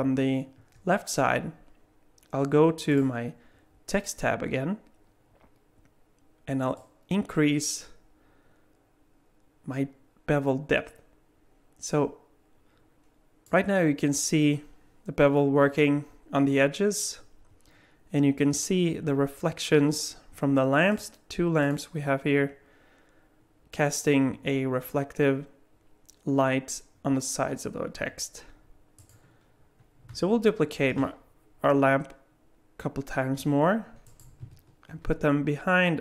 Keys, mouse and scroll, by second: 0.0-2.8 scroll up 4, 2.9 click, 6.8 click, 20.9 click, 21.6 click, 29.0 click, 30.8 shift+d, 34.9 shift+d.